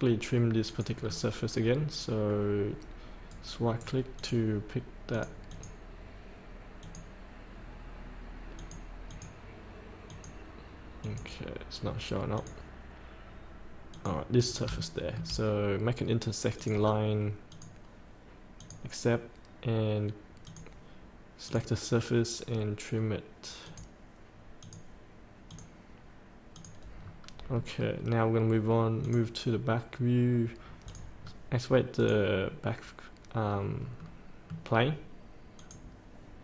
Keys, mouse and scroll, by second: 0.7 click, 1.0 scroll down 1, 3.3 right click, 4.2 click, 14.4 scroll up 1, 14.8 shift+middle click, 16.5 click, 27.0 scroll up 1, 27.6 middle click, 29.0 click, 30.6 scroll up 1, 30.8 click, 31.2 scroll up 1, 32.0 click, 34.0 middle click, 35.5 click.